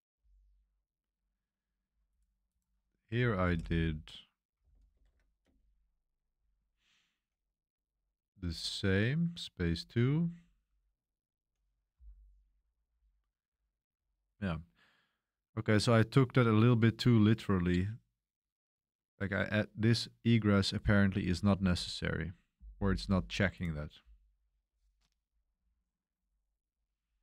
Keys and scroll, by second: 2.9-8.3 typing, 9.3-11.7 typing, 20.8-21.8 typing.